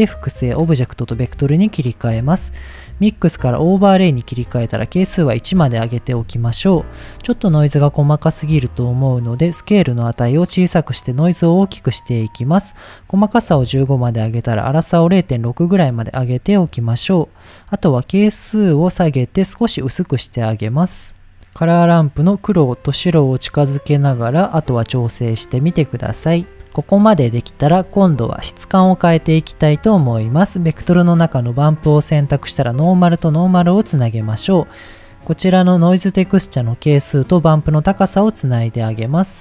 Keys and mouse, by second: 0.7 middle drag, 1.4 middle click, 2.2-3.4 drag, 4.1 click, 5.3 shift+middle click, 8.5-12.1 drag, 12.7 click, 14.0-15.6 drag, 17.9-20.1 drag, 20.9 middle click, 21.6-22.9 drag, 23.3-24.5 drag, 24.9 click, 26.1 click, 27.3 middle click, 29.3 shift+a, 31.7-32.4 drag, 32.9 middle click, 33.4 click, 34.2 middle click, 36.3-37.8 drag, 38.2 middle click, 39.1-39.4 middle drag.